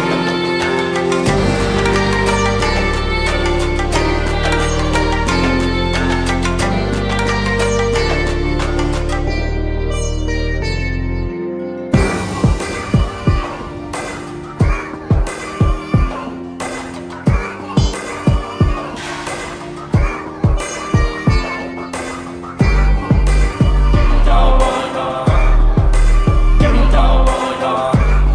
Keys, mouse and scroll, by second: 2.1-5.9 alt+drag, 13.6 ctrl+0, 15.7 click.